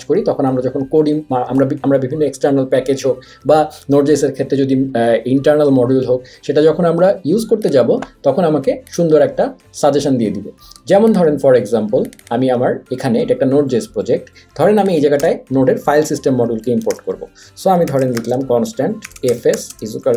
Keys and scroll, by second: 15.2 Return, 16.5-20.1 typing.